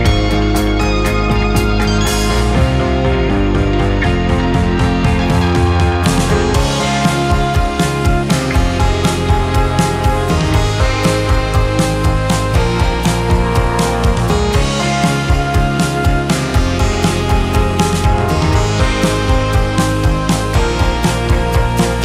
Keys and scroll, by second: 0.4 space, 8.5 ctrl+c, 8.6 ctrl+v, 12.3 space.